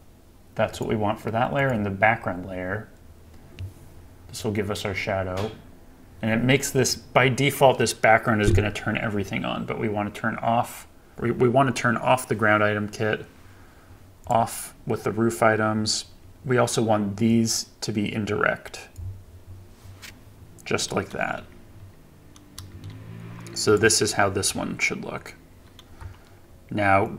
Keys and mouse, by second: 0.8-2.6 drag, 22.5 KP_0, 23.7 click.